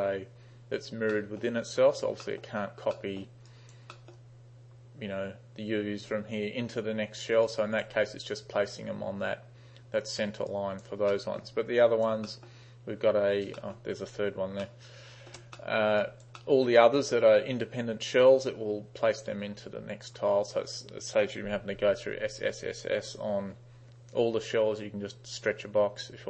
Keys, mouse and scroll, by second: 1.2 middle click, 1.8 right click, 2.2 middle drag, 3.0 middle click, 3.5 right click, 4.0 middle click, 7.5 right click, 10.5 right click, 11.1-11.4 middle drag, 11.8 right click, 12.3 middle click, 13.6 middle click, 14.1 space, 14.7-15.4 middle drag, 15.6 middle drag, 16.1 right click, 16.4-16.8 middle drag, 16.9 right click.